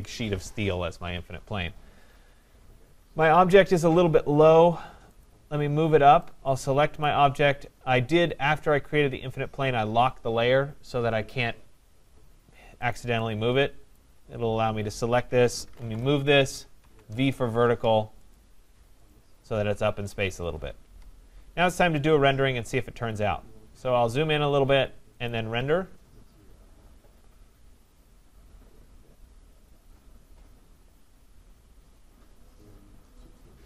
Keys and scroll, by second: 15.9 Return, 20.8 Escape.